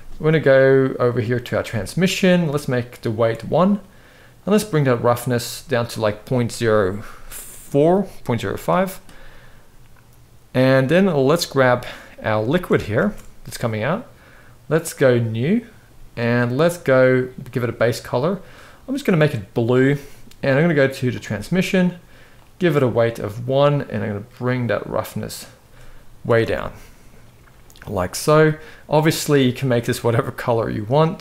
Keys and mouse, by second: 1.3 click, 2.3 click, 4.2 click, 10.9 click, 12.3 space, 12.9 space, 14.8 click, 17.3 click, 20.8 click, 22.0 click, 24.1-25.3 drag, 26.1 alt+a, 28.4 drag.